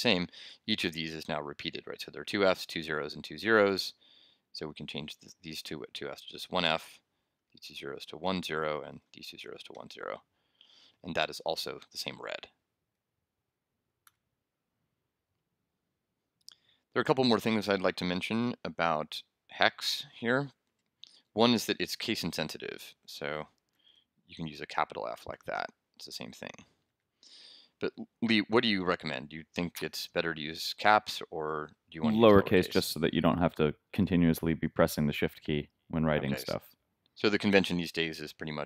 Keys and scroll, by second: 0.5 super+s, 1.0 super+Left, 4.9 shift+Right, 7.3 shift+Left, 7.5 shift+Right, 8.2 shift+0, 9.0 shift+Left, 9.1 shift+Right, 9.7 shift+0, 10.5 super+0, 10.6 super+s, 14.0 super+r, 20.2 super+Tab, 23.3 shift+BackSpace, 23.7 shift+f, 24.7 shift+super+f, 25.3 super+s, 26.9 super+r, 28.3 super+Tab.